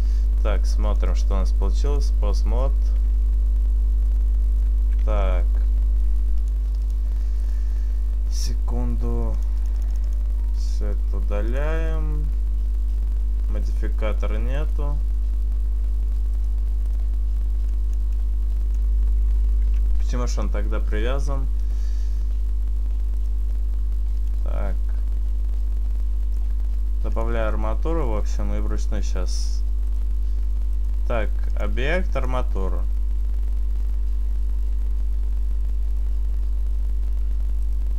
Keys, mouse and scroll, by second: 0.8 right click, 0.8 click, 1.2 click, 2.6 right click, 3.3 r, 4.6 right click, 5.1 Tab, 6.5 click, 7.4 right click, 9.3 click, 10.9 click, 10.9-11.6 scroll down 2, 11.6 click, 11.6-12.2 scroll down 2, 13.7 right click, 14.6 right click, 16.9 right click, 17.8 click, 18.2 click, 19.7 ctrl+z, 23.3 right click, 24.2 click, 30.0 right click, 30.8 right click, 31.5 click, 37.7 right click.